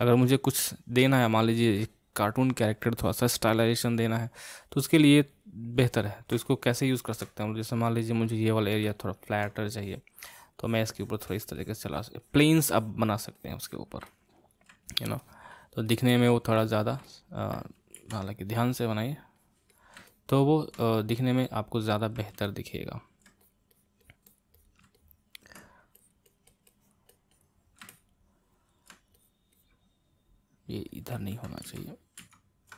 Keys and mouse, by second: 1.2-4.3 middle drag, 5.9-9.8 ctrl+middle drag, 9.8-14.1 drag, 14.1 middle click, 14.8-17.0 drag, 17.0-18.1 middle drag, 18.1 ctrl+z, 19.0-20.1 drag, 20.1 middle click, 20.9 click, 21.4-23.4 middle drag, 23.4-25.0 drag, 25.0-26.0 middle drag, 26.0-27.9 drag, 27.9-29.2 middle drag, 29.2-31.8 drag, 31.8 ctrl+z, 32.3 ctrl+z.